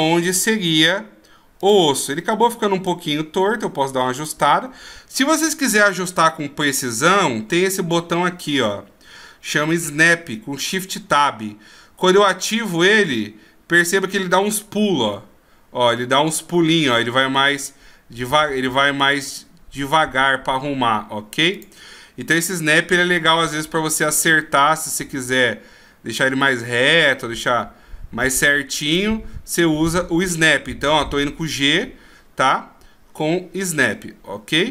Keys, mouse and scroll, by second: 1.6 click, 2.8 click, 10.6 click, 12.0 click, 15.0 g, 23.5 r, 30.9 g.